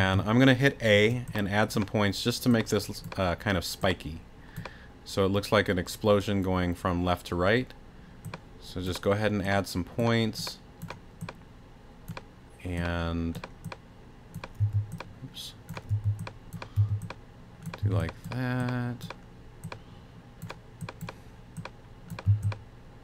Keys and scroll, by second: 14.6 t, 15.9 t, 18.8 t, 22.3 a.